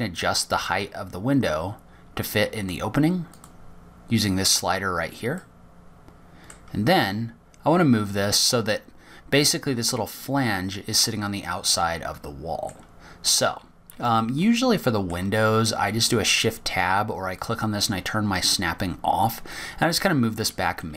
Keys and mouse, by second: 1.0 click, 2.9 click, 3.3 click, 3.6 click, 3.8 click, 4.4-7.4 drag, 8.1 click, 10.1-11.3 middle drag, 16.4-17.5 middle drag, 18.9-19.9 shift+drag.